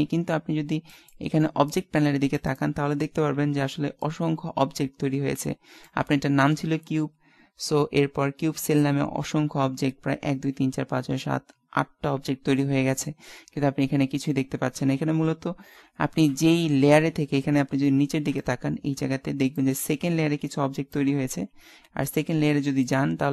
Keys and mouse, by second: 22.9 click.